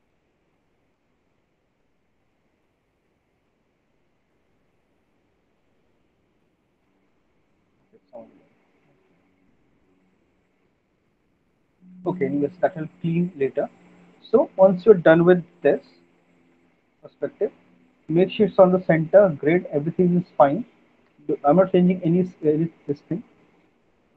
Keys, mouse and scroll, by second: 1.7 click, 1.9 click, 2.9 middle click, 3.2 middle click, 3.3 middle click, 3.9 middle click, 6.2 click, 6.4 click, 7.0 middle click, 7.5 middle click, 7.8 middle click, 8.8 middle click, 9.2 middle click, 10.9 middle click, 12.1 middle click, 13.5 click, 14.0 middle click, 14.4 middle click, 15.7 alt+w, 16.8 alt+w, 17.2 alt+middle click, 17.5 alt+middle click, 17.7 middle click, 17.9 middle click, 18.0 alt+middle click, 19.7 alt+middle click, 20.4 middle click, 21.0 alt+middle click, 22.7 click.